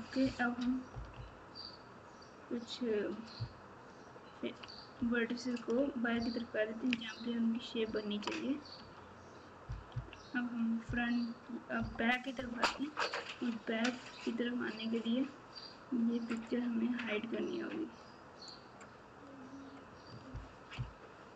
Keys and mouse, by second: 0.9 KP_4, 1.1 KP_4, 3.3 ctrl+KP_6, 3.8 ctrl+KP_6, 4.9-6.8 KP_Subtract, 7.8 ctrl+KP_6, 8.7 Tab, 9.9 KP_1, 11.7 KP_9, 14.0 click, 16.3 click, 16.4-19.5 right drag, 20.7 ctrl+KP_6.